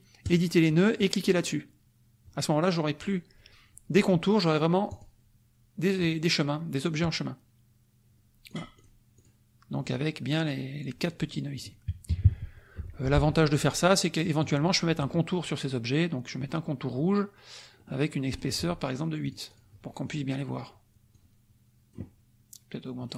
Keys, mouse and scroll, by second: 0.2 click, 4.9 click, 8.4 click, 9.3 click, 9.7 click, 11.0 click, 11.6 click, 12.0 KP_Subtract, 12.7 F1, 12.9 click, 13.6-14.6 drag, 16.5 click, 17.7 click, 18.3 right click, 19.2 click, 21.1-22.1 drag.